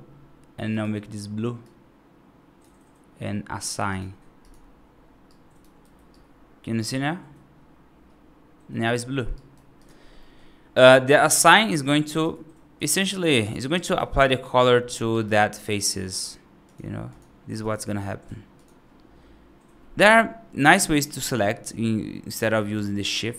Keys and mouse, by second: 0.5 click, 4.3 click, 5.2 right click, 5.7 F2, 6.0-8.8 right drag, 9.2 right drag, 9.6 click, 10.0 middle drag, 12.6 F3, 13.6 right click, 15.0 right click, 15.7 shift+click, 16.9 shift+click, 17.4 shift+click, 20.9-23.3 drag.